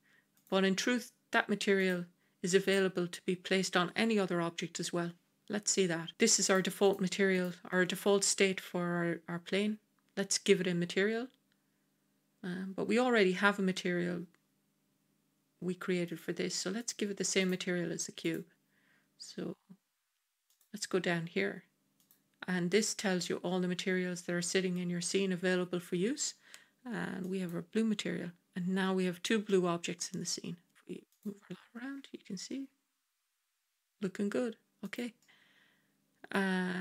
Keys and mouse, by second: 0.2 click, 1.7 click, 16.0 click, 16.7 click, 17.3 click, 18.1 click, 20.4-21.9 drag, 22.7-27.4 drag, 29.4-30.7 middle drag, 31.0 click, 32.4 g, 35.1-36.2 middle drag.